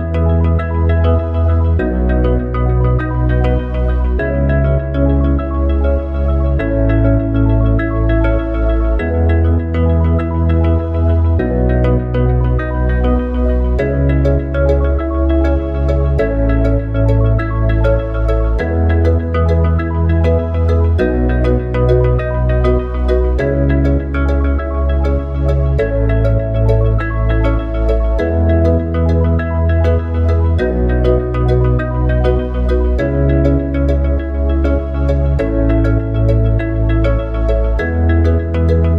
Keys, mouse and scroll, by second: 2.0 e, 5.8 click, 10.2 e, 15.4 e, 20.0 click, 23.1 e, 31.5 ctrl+r, 35.8 ctrl+r.